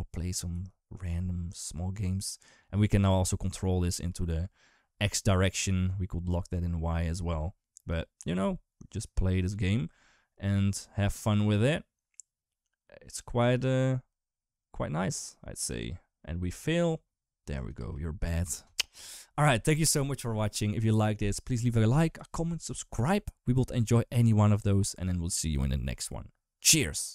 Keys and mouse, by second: 0.3 g, 17.6 space.